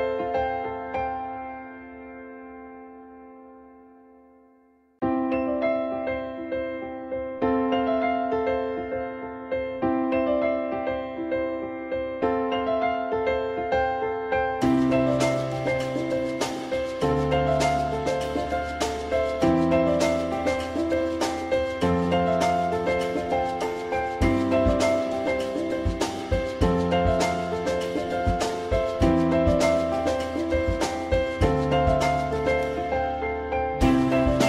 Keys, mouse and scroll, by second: 16.8-18.1 middle drag, 20.4 click, 25.0 ctrl+i, 25.8 Delete, 32.4 w, 32.6 click.